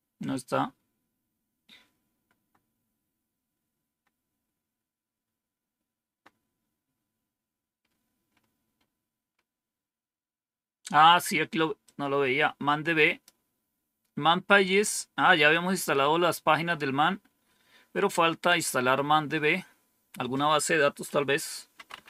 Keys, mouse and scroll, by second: 7.0 scroll down 2, 7.7-8.3 scroll down 4, 9.2 scroll down 2, 11.7-13.1 drag, 17.3-18.9 scroll down 5, 20.0 scroll down 1, 21.4-22.0 typing.